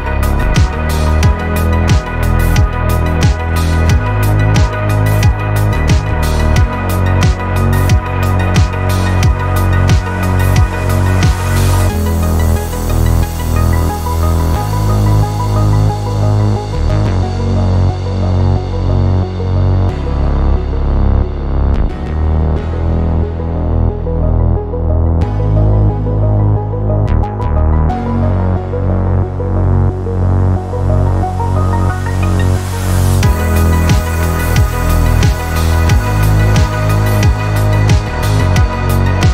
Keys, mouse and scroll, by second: 0.7 click, 4.3 click, 7.0 click, 8.4 click, 9.8-11.5 drag, 12.3 click, 13.5 shift+click, 15.1 click, 16.2 click, 17.1 click, 18.2 -, 18.8-19.9 drag, 19.9 middle click, 21.8 click, 22.4 middle click, 23.0 click, 23.4 middle click, 24.0 middle click, 24.2 click, 27.4 click, 28.4 middle click, 29.0 middle click, 29.6 click, 30.7-34.2 drag, 34.4 click, 35.5 click, 37.0 click, 38.5-39.3 drag.